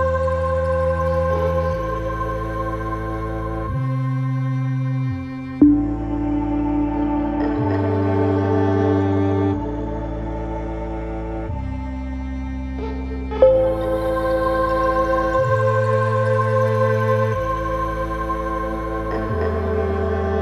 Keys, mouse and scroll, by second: 12.2-14.4 alt+drag, 14.4-20.4 alt+drag.